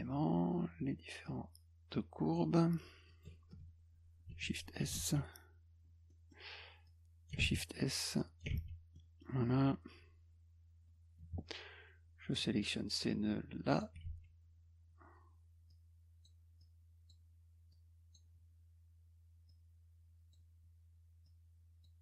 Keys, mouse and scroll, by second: 1.2-2.3 drag, 3.1 click, 5.1 s, 6.1 middle click, 6.9 click, 8.2 click, 8.6 s, 8.9 middle click, 12.3-13.8 drag, 14.1 s, 15.7 click, 16.6 click, 17.7 click, 19.5 click, 21.3 click.